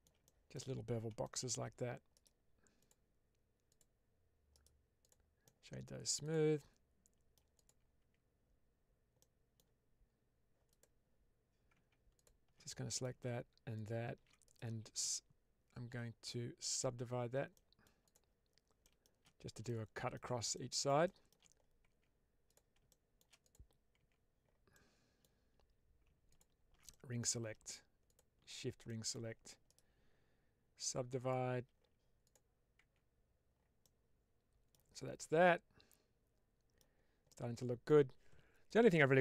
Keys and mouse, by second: 0.1 shift+middle drag, 1.1-1.4 shift+middle drag, 2.0 right click, 3.6 click, 4.5 right click, 5.3-5.9 middle drag, 6.1 click, 6.5-7.2 middle drag, 7.5 click, 7.9 Tab, 9.1 middle click, 10.6 click, 12.1 ctrl+alt+click, 12.6 middle click, 14.4-16.8 right drag, 17.4 middle click, 17.9 click, 18.7 shift+middle click, 19.7 shift+middle click, 20.4 middle click, 20.9 shift+middle click, 21.8 Tab, 22.3 click, 22.8 shift+middle click, 23.9 Tab, 24.6 middle click, 26.2 click, 26.8 middle click, 28.8 middle click, 29.6-31.2 right drag, 32.1 click, 32.7 Tab, 33.7-34.6 middle drag, 35.1-36.7 middle drag, 37.2-37.8 middle drag.